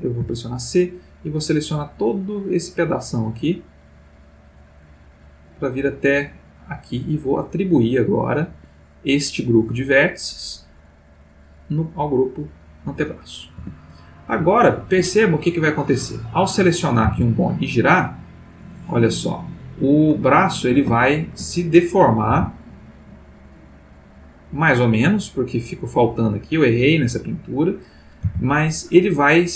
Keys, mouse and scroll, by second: 0.2 c, 0.6-8.5 drag, 8.5 Escape, 12.4 click, 13.5 Tab, 14.5-15.1 ctrl+middle drag, 15.8 click, 17.0 r, 19.8 Escape, 20.2-21.5 ctrl+middle drag, 21.8 shift+click, 22.3 r, 27.1 Escape, 27.7 click, 28.2 r.